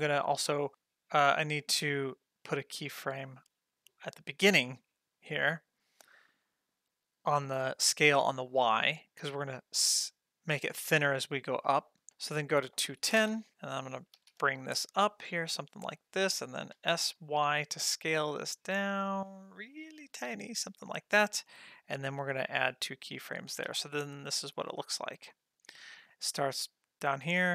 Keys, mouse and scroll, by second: 0.7 click, 1.4 click, 5.2 click, 12.1-13.2 drag, 14.2 g, 16.7 s, 22.0 click, 22.6 click, 23.7 space.